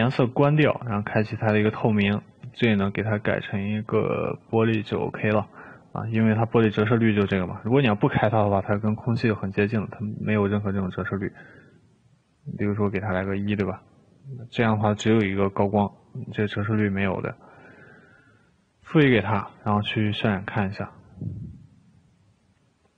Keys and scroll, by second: 13.1 1.